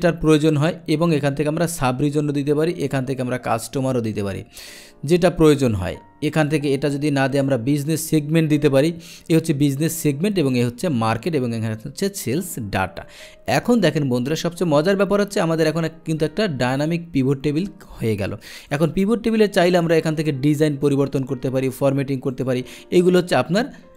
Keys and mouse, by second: 1.1 click, 2.8-3.8 drag, 4.7 click, 6.5 click, 7.4 click, 18.7 click, 19.7 click, 20.9 click, 22.3 click.